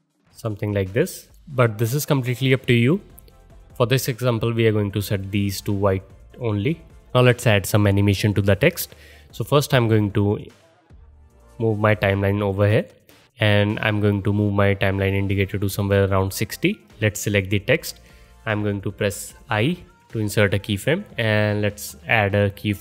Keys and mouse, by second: 0.4 click, 0.4-0.9 middle drag, 0.9 click, 1.0 middle drag, 1.2 click, 1.3-10.2 middle drag, 3.8 ctrl+z, 4.3 ctrl+z, 4.7 ctrl+z, 5.2 ctrl+z, 6.5 ctrl+z, 7.0 ctrl+z, 10.2-17.2 drag, 17.2-22.8 middle drag, 19.5 i.